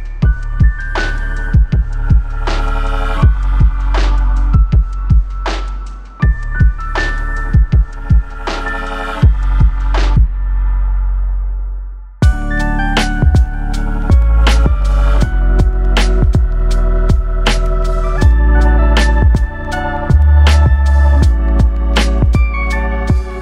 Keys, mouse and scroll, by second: 0.5-1.4 drag, 3.2 click, 4.0 click, 8.1 click, 9.2 click, 10.1-11.7 drag, 13.0-15.1 drag, 21.0-23.2 drag.